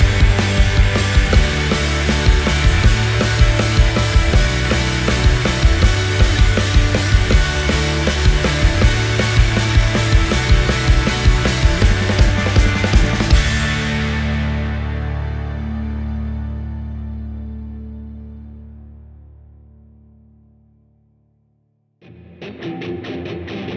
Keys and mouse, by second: 3.3 Tab, 4.0 click, 4.7 click, 5.6 shift+s, 7.3 Tab, 7.9 click, 8.5 shift+a, 11.5 s, 16.6 drag, 16.6 right drag, 16.8 middle click, 17.1 click, 17.1 right click, 19.2 ctrl+a, 20.3 a, 21.5 click, 22.2 s, 23.6 g.